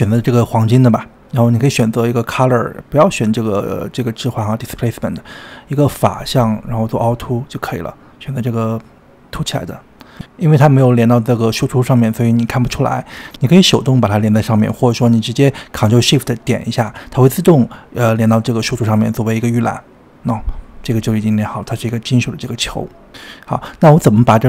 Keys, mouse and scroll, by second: 12.8 drag, 13.9 click, 16.3 click, 19.5 ctrl+shift+click, 21.3-23.5 middle drag, 23.5 ctrl+shift+click.